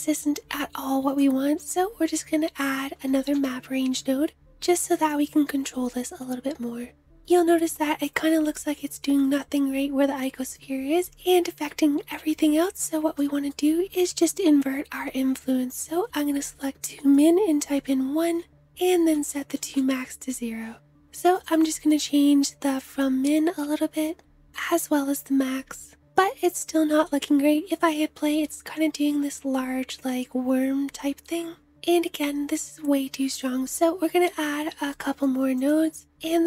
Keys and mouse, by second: 2.6 click, 3.0 shift+a, 4.6-7.0 drag, 7.0-24.7 middle drag, 26.7 space, 26.9-34.4 middle drag, 33.2 space, 35.5-36.4 shift+drag, 36.2 shift+a.